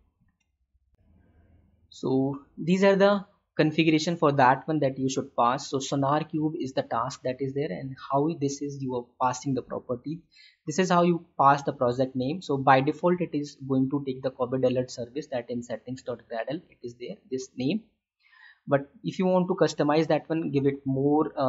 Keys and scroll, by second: 0.2 alt+Tab, 2.5 ctrl+v, 21.1 Delete.